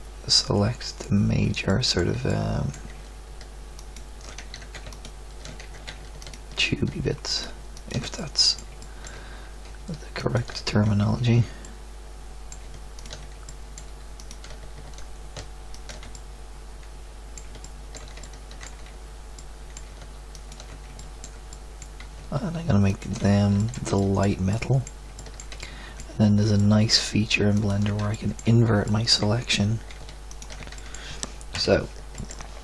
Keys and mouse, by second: 4.5 ctrl+z, 5.6 ctrl+z, 11.7 middle click, 27.5-28.9 middle drag, 30.9 middle click, 31.5 KP_1, 32.3 middle click.